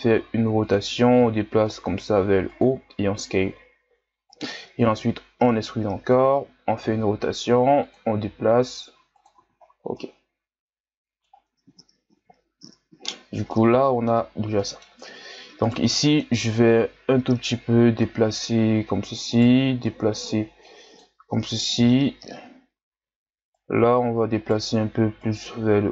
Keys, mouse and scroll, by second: 1.2 g, 6.8 r, 8.1 g, 9.3 z, 9.7 scroll down 2, 9.9-11.3 middle drag, 11.3 Tab, 12.1 KP_1, 13.1-13.5 scroll up 1, 13.5-14.2 middle drag, 14.2 scroll up 1, 14.5-17.1 middle drag, 17.1-19.3 drag, 19.3 right click, 21.6 click, 21.7 KP_1, 22.5-22.9 shift+scroll down 1, 22.9-23.5 scroll up 2, 23.5 right click, 25.2 right click.